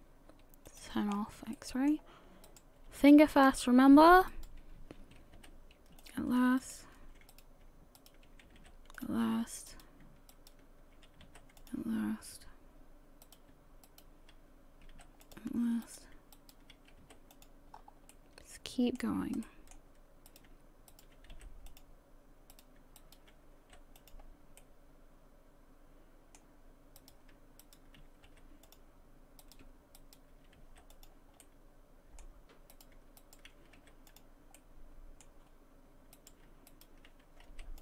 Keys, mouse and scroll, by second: 0.7 click, 1.1 scroll up 5, 1.5 shift+middle click, 2.0 scroll up 1, 2.5 right click, 2.5 right click, 4.3 shift+right click, 4.6 shift+right click, 5.4 m, 6.6 right click, 8.0 shift+right click, 8.2 shift+right click, 8.6 m, 9.7 right click, 10.3 shift+right click, 11.2 m, 13.2 right click, 13.9 shift+right click, 14.9 m, 15.8 right click, 16.3 shift+right click, 17.0 m, 17.7-18.0 scroll down 3, 18.1 middle click, 19.4 middle click, 20.3 right click, 20.9 shift+right click, 21.3 m, 22.5 right click, 23.0 shift+right click, 23.6 m, 23.6 m, 24.6 middle click, 27.0 right click, 27.6 shift+right click, 28.3 m, 29.4 right click, 30.0 shift+right click, 30.6 m, 31.4 middle click, 32.7 right click, 33.2 shift+right click, 33.8 m, 34.6 middle click, 35.5 scroll up 2, 36.1 right click, 36.7 shift+right click, 37.5 m.